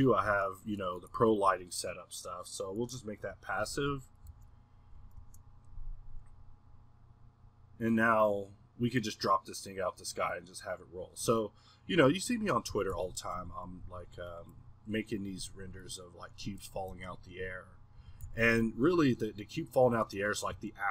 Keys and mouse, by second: 0.8-3.6 middle drag, 11.2 Escape, 12.2-12.7 drag, 12.7 g, 13.7 click, 13.8 1, 14.8-16.9 middle drag, 17.9 click, 18.0 g, 19.0-20.9 middle drag.